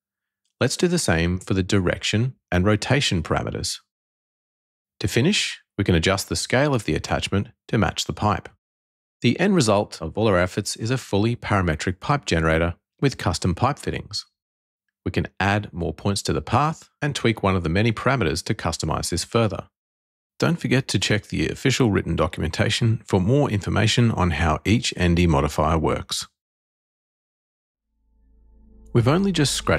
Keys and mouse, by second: 2.9 click, 3.6-5.1 drag, 7.0-9.3 drag, 9.8 click, 10.2-11.8 middle drag, 11.8 click, 12.2 Tab, 12.9 click, 13.7 e, 14.5 click, 15.0 middle click, 15.9 middle click, 16.2 click, 16.3 middle click, 17.1 click, 17.8 g, 19.2 click, 19.9 click, 20.6 middle click, 21.0 click, 21.1 middle click, 21.3 click, 22.5 Tab.